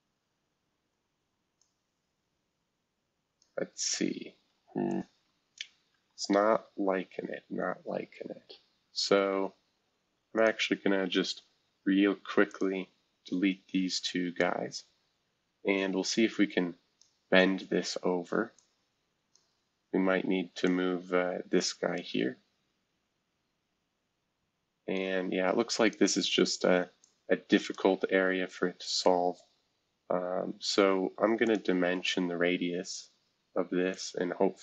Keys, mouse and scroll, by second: 0.8-1.3 scroll up 1, 1.3 scroll up 1, 1.6-3.4 drag, 4.8 click, 5.8 ctrl+z, 7.4-8.9 scroll up 1, 10.3 click, 11.6 Delete, 12.5 click, 12.8 Delete, 14.4-17.0 drag, 17.3-23.4 drag, 17.3 scroll down 1, 24.9-25.9 drag, 27.0 click, 28.4 scroll down 1, 29.3 scroll down 1, 31.4-33.0 drag, 33.9-34.6 drag.